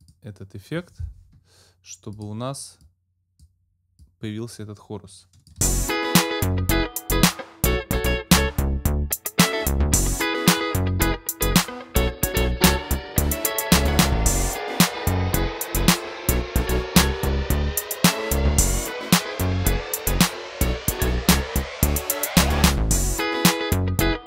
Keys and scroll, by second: 5.6 space.